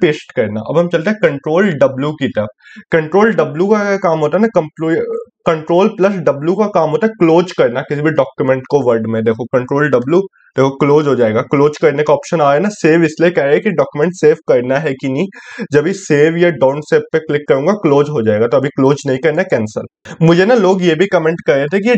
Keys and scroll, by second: 1.4 ctrl+w.